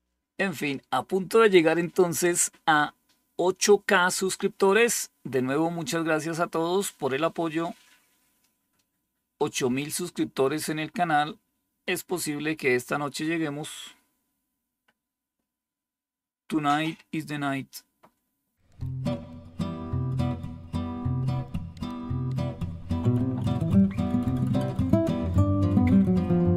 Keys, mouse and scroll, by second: 24.0 click.